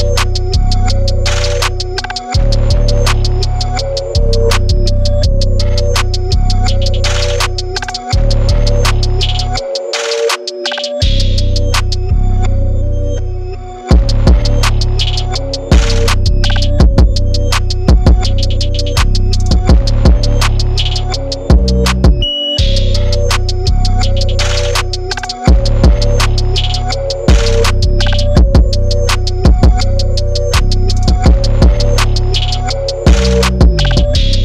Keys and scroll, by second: 1.1 super+0, 1.1 super+-, 2.2 super+1, 2.3 super+-, 2.4 super+-, 2.5 super+-, 2.6 super+0, 3.1-6.5 typing, 4.6 super+z, 4.8 super+a, 4.9 super+d, 4.9 super+=, 6.4 super+z, 12.7 super+z, 12.8 x, 12.9 x, 13.9 super+-, 14.3 super+0, 14.3 super+=, 14.4 super+=, 15.4 super+u, 16.0 0, 17.9 super+-, 18.1 super+-, 18.1 super+0, 18.1 super+=, 18.2 super+0, 19.4-31.1 typing, 31.5 super+-, 31.9 super+0, 32.0 super+-, 32.1 super+0, 32.6 super+-, 32.7 super+-, 32.7 super+1, 33.3-34.4 typing.